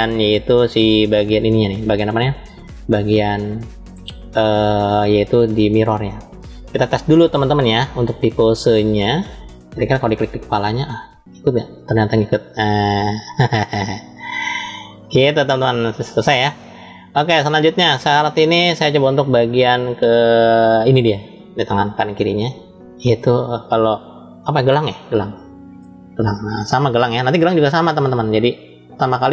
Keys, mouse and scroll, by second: 5.5-6.3 middle drag, 6.7 click, 8.1-9.2 drag, 9.8 click, 10.8 click, 14.9 ctrl+z, 18.8-19.5 drag, 20.6 click, 22.7 shift+middle click, 25.9-28.8 scroll down 1, 28.8-29.1 scroll down 1.